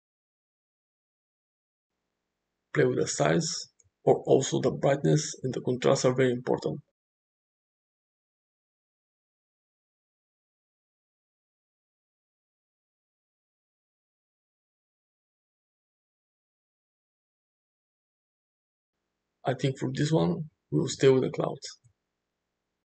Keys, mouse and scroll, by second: 0.1-4.5 drag, 2.1 middle click, 9.7-13.3 drag, 13.3-14.9 middle drag, 14.9-16.9 drag, 20.0-22.1 drag.